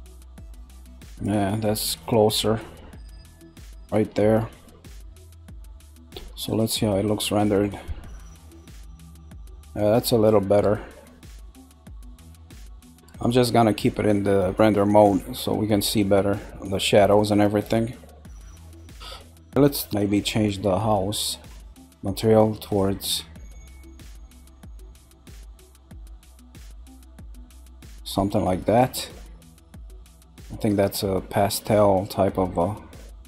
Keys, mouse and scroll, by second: 2.6-3.6 middle drag, 3.6-4.2 scroll up 2, 4.2-6.5 shift+middle drag, 6.5 click, 8.7-10.3 scroll down 1, 11.1 scroll down 1, 12.8 shift+middle click, 13.4-14.1 scroll down 1, 15.1-18.2 middle drag, 18.6 scroll up 3, 19.2-21.2 shift+middle drag, 21.2 click, 22.6 click, 29.5-30.8 middle drag, 30.8-32.6 scroll up 1, 32.6-33.2 middle drag.